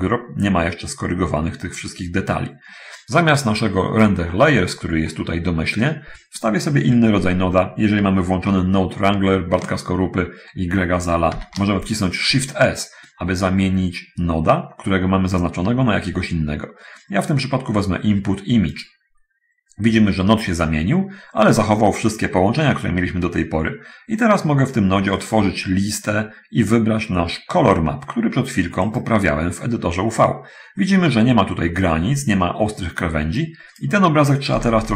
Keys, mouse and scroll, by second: 3.6 click, 4.4-5.2 scroll up 1, 7.0-7.4 scroll down 1, 7.4-8.4 middle drag, 11.6 shift+s, 19.0 click, 29.1 click, 33.6 click, 34.8 v.